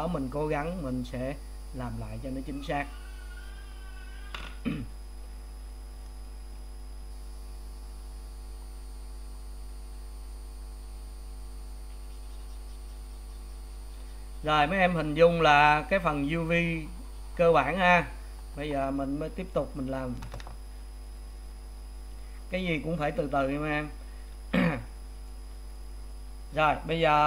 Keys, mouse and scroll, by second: 25.7 click.